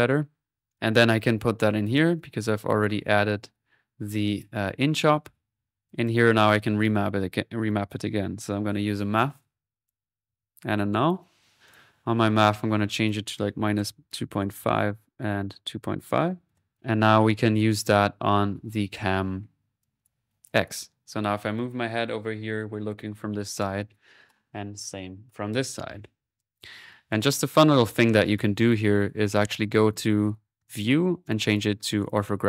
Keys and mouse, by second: 0.5 right click, 0.9-2.9 drag, 2.9-4.0 middle drag, 4.2 click, 7.6 right click, 8.2-8.6 typing, 9.3-10.6 drag, 10.6 alt+n, 11.0 alt+click, 11.6 click, 11.7 alt+n, 12.4-13.5 drag, 16.7 click, 17.7 click, 18.6-19.9 drag, 20.5 click, 26.5-29.6 drag, 30.6-32.4 drag.